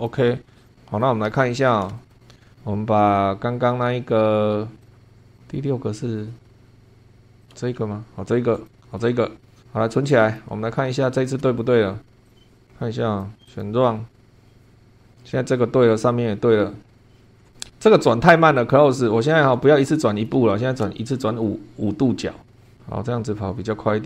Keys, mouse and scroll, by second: 0.5 scroll down 2, 0.6 click, 0.7 middle click, 1.9 shift+middle click, 2.5 scroll up 1, 4.1 scroll up 2, 4.9 click, 5.1 scroll up 2, 5.3 click, 6.4 space, 6.9 scroll up 2, 7.4 click, 7.5 space, 8.5 click, 9.0-9.6 middle drag, 10.2 click, 10.9 shift+middle click, 12.3 click, 12.5 click, 13.4 click, 14.4 middle click, 17.2 shift+middle click, 18.5 click, 19.8 click, 20.9 5, 22.7 click.